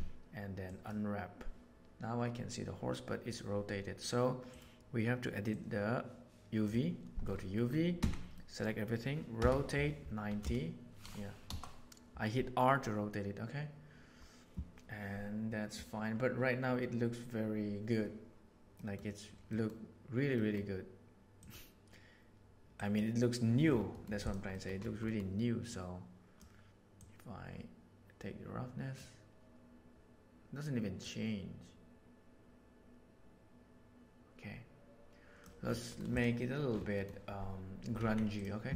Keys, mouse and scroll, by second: 4.4-5.4 drag, 7.6 middle click, 7.9 a, 8.2 middle click, 9.3 r, 18.8 middle click, 19.5 middle click, 20.2 middle click, 21.3-21.8 drag, 23.9 middle drag, 24.2 click, 25.0 middle click, 25.6 click, 26.9-29.0 drag, 31.0-35.4 drag, 36.9 middle click, 37.9 Tab.